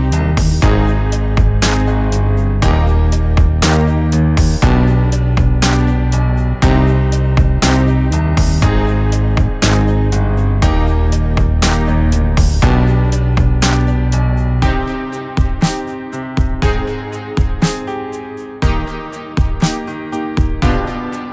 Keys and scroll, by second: 2.4 ctrl+z, 3.2 [, 5.2 ], 5.7 ], 7.7 ctrl+z, 12.9 ctrl+z, 14.6 ctrl+z, 15.1 [, 16.1 ctrl+z, 16.8 [, 17.2 ctrl+z.